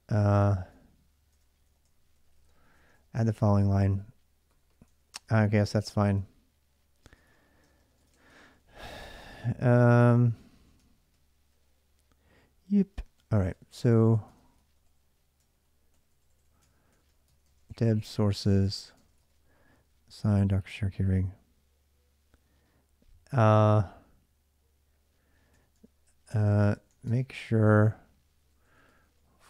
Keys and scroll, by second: 0.0-19.6 typing, 7.8 Return, 7.9 Return, 8.1 ctrl+[, 15.2 ctrl+[, 16.4 ctrl+[, 21.3 j, 25.3-29.4 typing, 25.5 Return.